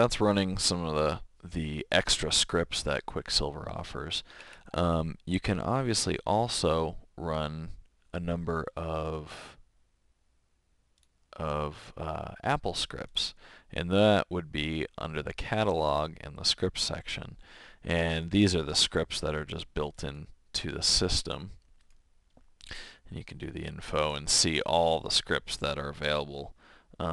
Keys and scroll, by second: 5.9 super+,.